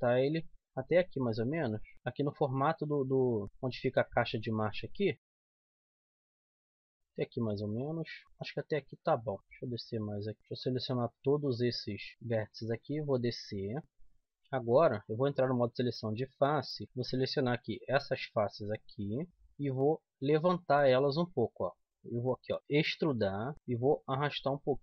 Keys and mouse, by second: 0.4-1.5 right drag, 0.6-2.4 drag, 1.7 right click, 2.4-5.4 middle drag, 6.5 right click, 7.3 click, 7.5 middle click, 8.2 click, 8.8 right click, 10.4 ctrl+z, 10.6 c, 12.1 right click, 12.3 click, 12.7 middle click, 13.6 click, 13.8 z, 14.7 a, 15.7 click, 20.9 z, 21.9-23.2 middle drag, 22.8 e.